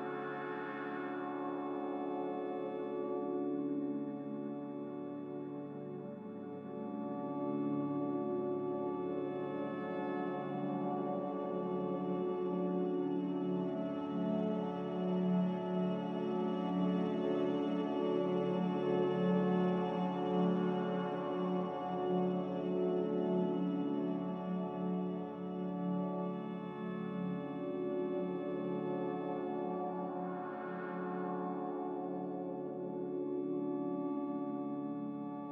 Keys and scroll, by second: 2.5 z, 5.0 a, 6.6 a, 11.6 z, 15.5 a, 17.5 ctrl+z, 21.0 z, 27.4 a, 32.2 z.